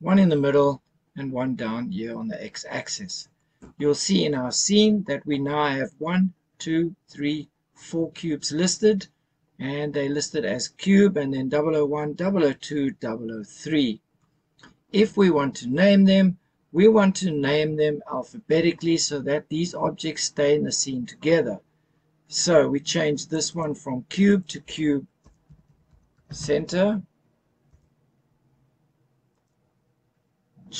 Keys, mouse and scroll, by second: 23.3 click, 23.5-27.7 drag, 29.3 click.